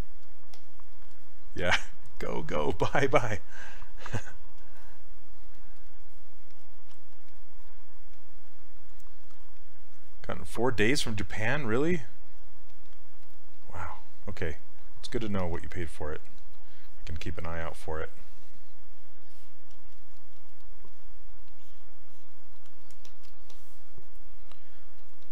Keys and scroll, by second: 6.9 s.